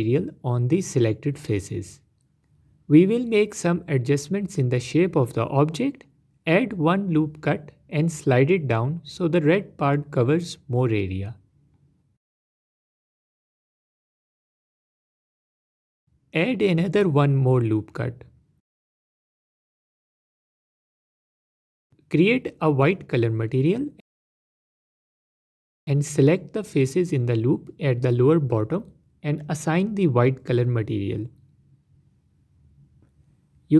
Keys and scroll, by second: 1.3 Tab, 2.0 Tab, 6.6 ctrl+r, 19.0 ctrl+r, 25.6 Tab.